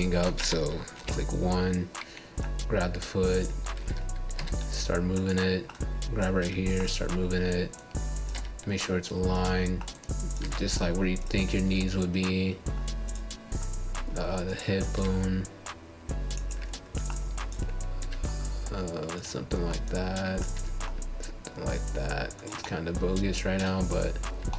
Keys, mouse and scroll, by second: 4.3-5.5 scroll down 1, 5.5 click, 6.5 g, 8.0 click, 8.9 g, 10.3-11.7 middle drag, 11.8 scroll down 1, 12.0 click, 12.6 g, 13.6 click, 13.8 g, 14.6-18.6 middle drag, 18.6 click, 19.3 click, 20.9 g, 23.6-24.5 middle drag.